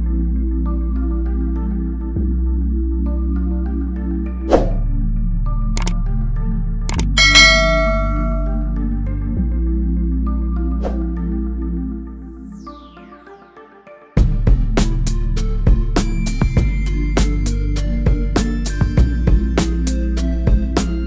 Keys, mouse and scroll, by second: 4.0-4.3 scroll down 1, 4.3-4.8 scroll, 4.8 scroll up 1, 5.4-6.4 scroll up 1, 6.4 click, 8.8 click, 8.9 click, 11.6 space, 15.0 space, 17.2 click, 20.2-21.0 typing.